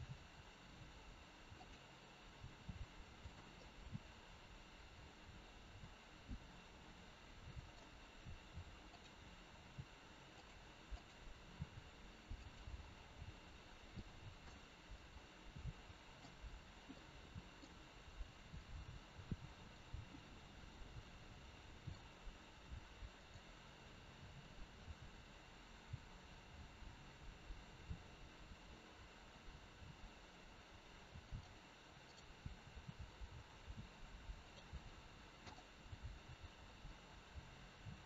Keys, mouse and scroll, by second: 3.2 r, 3.5 middle click, 8.8 click, 9.5 r, 10.9 click, 11.6 r, 13.9 middle click, 14.9 middle click, 23.1 middle click, 23.1 click, 24.8 g, 32.0 click, 32.5 g, 35.4 click, 35.9 g.